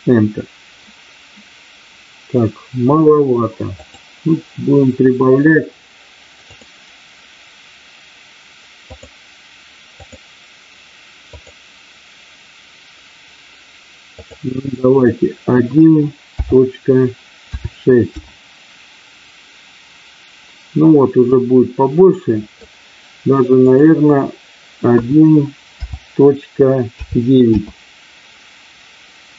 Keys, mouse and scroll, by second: 3.7-5.6 drag, 6.3-8.2 drag, 8.7-20.4 drag, 21.4-22.6 middle drag, 23.5-29.3 drag.